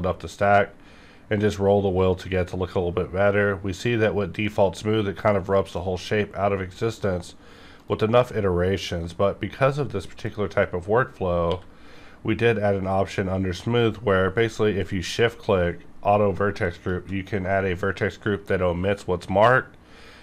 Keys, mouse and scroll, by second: 0.2 scroll down 1, 0.6 scroll up 1, 1.4 scroll down 1, 1.9 scroll up 1, 2.2 scroll down 1, 2.6 scroll up 1, 3.0 scroll down 1, 3.4 scroll up 1, 4.1 scroll down 1, 4.5 scroll up 1, 6.1 scroll down 1, 7.8 right click, 10.2 click, 11.4 q, 16.4 q, 16.6 shift+click, 16.7 shift+click, 19.7 scroll up 1.